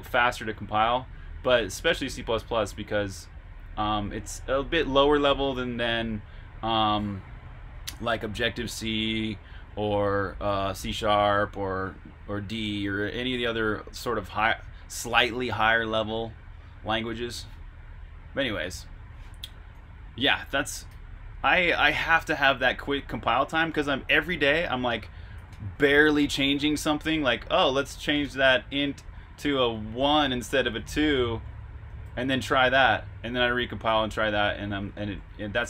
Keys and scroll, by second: 20.8 v, 21.3 BackSpace, 25.4-32.5 typing, 34.2 typing, 34.8 Escape.